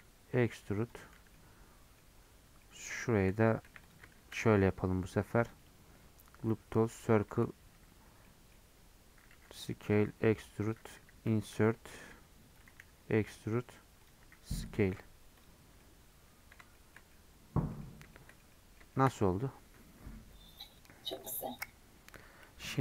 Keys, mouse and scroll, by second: 1.1 Tab, 1.3-2.4 middle drag, 2.4 Tab, 2.6 middle click, 2.8-3.6 scroll up 1, 3.6 1, 3.9 click, 4.1 ctrl+shift+b, 6.9-8.2 right drag, 8.2-9.3 middle drag, 9.3 s, 15.1 scroll down 1, 15.3 click, 15.6 scroll down 1, 15.8 middle click, 16.5 scroll up 1, 16.7-17.8 shift+middle drag, 17.8 scroll up 1, 18.1-19.2 shift+middle drag, 19.2-22.8 scroll up 1.